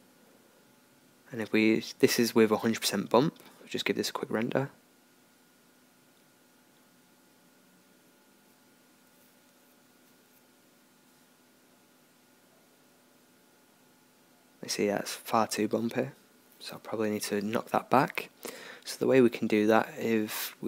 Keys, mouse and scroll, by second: 17.0 Escape, 18.7-20.6 drag.